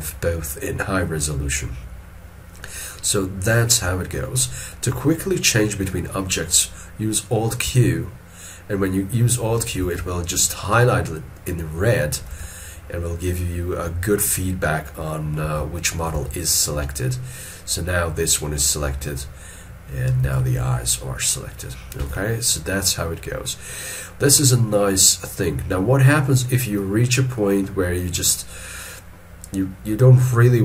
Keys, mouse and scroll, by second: 4.2 middle click, 7.7 alt+q, 9.9 alt+q, 12.2 alt+q, 15.5 alt+q, 16.2 alt+q, 20.3 alt+q, 22.0 alt+q.